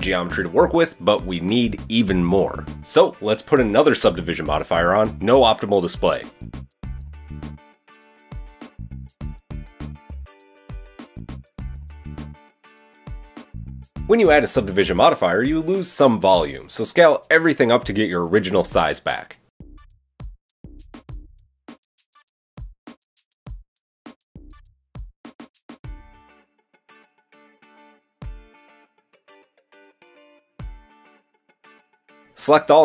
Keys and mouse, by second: 6.2-15.6 shift+middle drag, 7.3 Tab, 10.5 g, 14.1 KP_1, 15.3 Tab, 15.6-24.0 shift+middle drag, 18.0 s, 25.6 s, 27.7 KP_1, 29.6 Tab, 30.6-32.8 middle drag, 32.2 Tab.